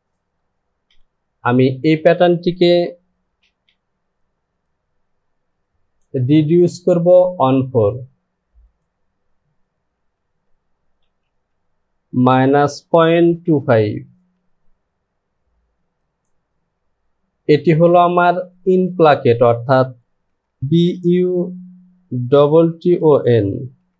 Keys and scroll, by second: 1.0 Home, 3.4 shift+f, 11.0 KP_0, 11.2 Down, 12.3 KP_Subtract, 12.9 KP_Subtract, 13.4 KP_Decimal, 13.7 KP_2, 16.7 e, 20.5 BackSpace, 20.6 b, 20.9 u, 22.3 t, 23.8 n.